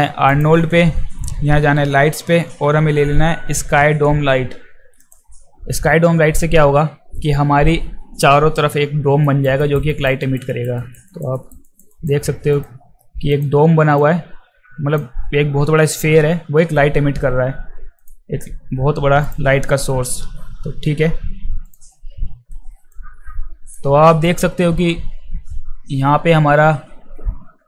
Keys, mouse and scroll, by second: 0.3 click, 5.0 click, 9.2 alt+right click, 9.6 alt+right click, 9.9 alt+right click, 10.2 alt+right click, 10.5 alt+right click, 10.8 alt+right click, 11.1 alt+right click, 11.3 alt+right click, 11.6 alt+right click, 11.9 alt+right click, 12.5 click, 13.3 click, 14.0-14.9 alt+drag, 18.0 click, 19.3 click, 20.2 f, 21.7 click, 22.9 alt+click, 23.3 alt+click, 23.4 alt+click.